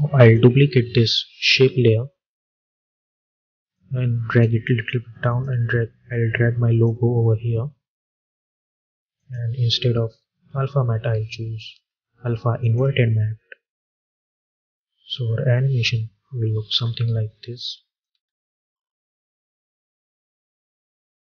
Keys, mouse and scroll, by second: 0.1 click, 1.4 ctrl+d, 3.6-9.0 drag, 12.5 click, 13.9 space, 16.6 space, 17.5 click, 18.0 space.